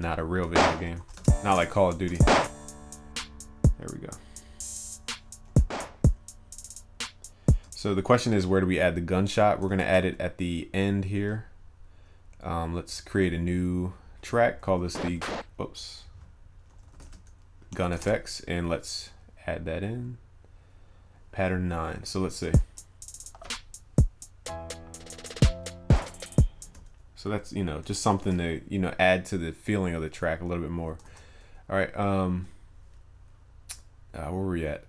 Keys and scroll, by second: 0.9 ctrl+s, 9.8 ctrl+s, 28.2 ctrl+s.